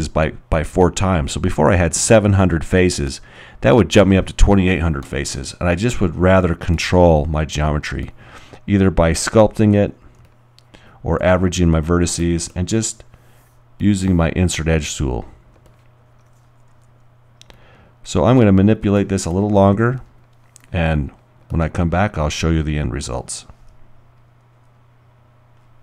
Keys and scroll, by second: 10.2 alt+b, 16.8 alt+r.